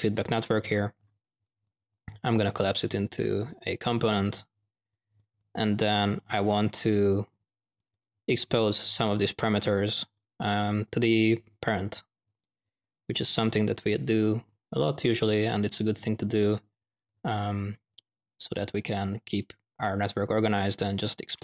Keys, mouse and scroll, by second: 1.4-2.9 drag, 3.1 click, 4.1-8.2 drag, 9.8-10.1 drag, 10.5-11.0 drag, 11.7-15.1 drag, 16.8 click, 17.3-18.1 drag, 18.2-19.6 drag, 19.8 click.